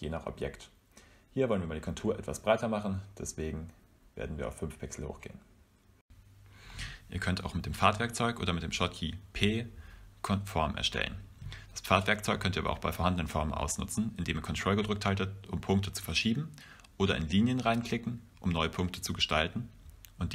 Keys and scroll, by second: 10.7-11.6 typing, 19.9 p.